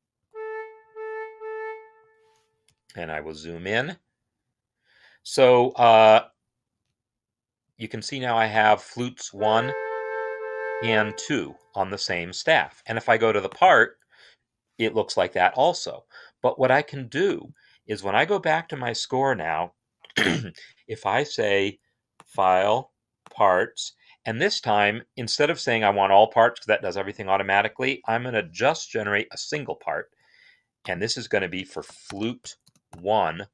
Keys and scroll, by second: 0.0-1.0 typing, 1.6 Escape, 9.1 space, 31.2 ctrl+a, 31.3-33.2 typing.